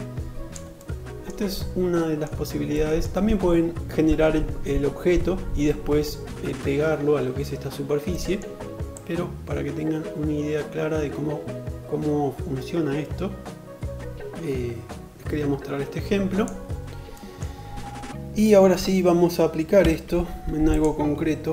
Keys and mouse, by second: 19.2 Delete, 20.3-21.5 middle drag, 21.0 Delete.